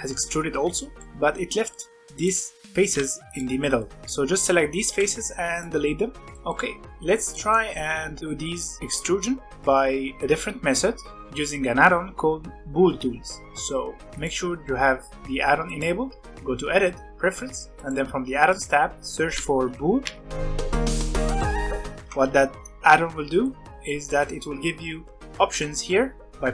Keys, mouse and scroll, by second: 1.8 scroll up 1, 2.1 middle click, 2.3 click, 3.2 ctrl+click, 3.8-4.8 middle drag, 4.8 x, 6.1 scroll down 2, 6.2-8.8 shift+middle drag, 9.6-11.0 middle drag, 11.1-14.0 middle drag, 14.1-17.3 drag, 21.6 middle click, 22.0 Tab, 23.4-25.4 middle drag, 25.4 n.